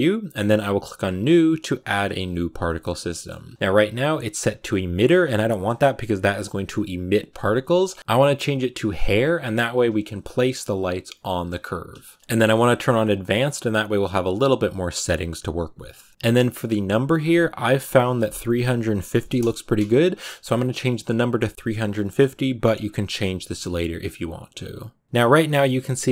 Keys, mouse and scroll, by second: 2.5 shift+middle click, 2.7 scroll down 1, 3.0-4.8 shift+middle drag, 4.8 click, 8.0 click, 8.9 click, 11.9-13.3 shift+middle drag, 13.3 click, 19.3-22.7 drag, 25.0-26.1 shift+middle drag.